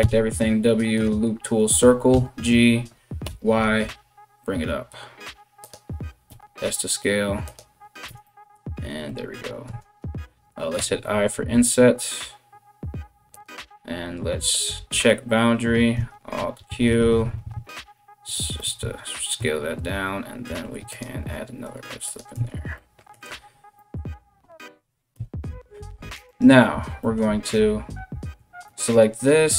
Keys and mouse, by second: 2.7 g, 5.9 s, 7.7 Tab, 9.3 Tab, 10.3 i, 14.1 click, 14.3-25.9 middle drag, 15.6-18.5 alt+q, 20.1 ctrl+r, 22.0 Tab, 24.7 KP_1, 25.9 right click, 26.0-29.5 middle drag.